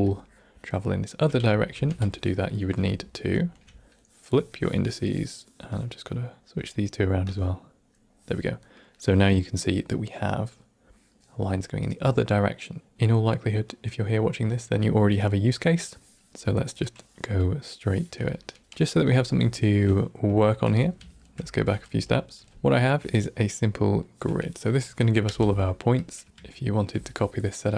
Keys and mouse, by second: 0.0-0.6 typing, 1.7 ctrl+space, 2.5 middle click, 3.1 ctrl+alt+click, 3.1 ctrl+alt+right click, 4.0 middle click, 4.5 middle click, 5.0 middle click, 5.7 middle click, 6.3 click, 7.2-7.8 drag, 8.6 middle click, 12.8 ctrl+middle click, 15.2 middle click, 16.3 middle click, 16.9-17.3 drag, 18.6 right click, 18.6 d, 18.7-19.0 drag, 19.1 x, 19.3 middle click, 19.8 drag, 20.6 drag, 21.6 middle click, 21.8 x, 22.3 click, 22.4 x, 22.5 middle click, 22.7 alt+shift+click, 23.6-23.9 middle drag, 24.7-25.1 drag, 25.2 g, 26.3 ctrl+Tab, 26.5 ctrl+middle click.